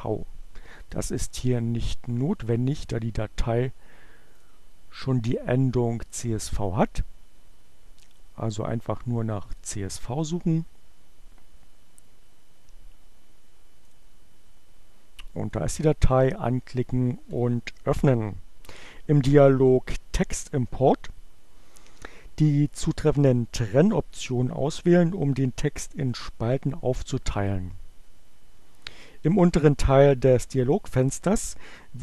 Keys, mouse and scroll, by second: 0.0-1.2 drag, 4.4 click, 6.3-8.5 drag, 13.8 click, 15.5 click, 16.8 click.